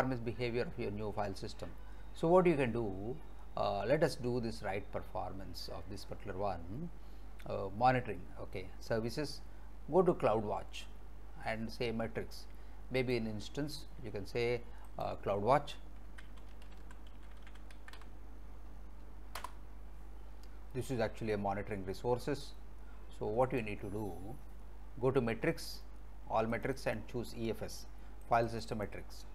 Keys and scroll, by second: 15.9-18.5 typing, 19.4 Return.